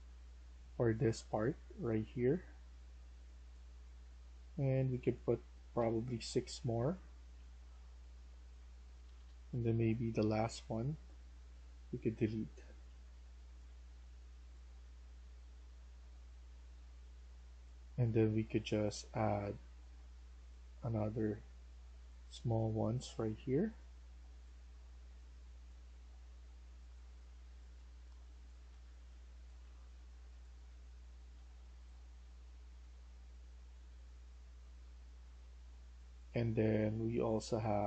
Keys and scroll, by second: 5.7 6, 6.8-7.8 typing, 8.9 Escape, 9.1 Escape, 12.1 Delete, 12.5-14.7 typing, 27.5-35.1 typing, 28.6 Escape.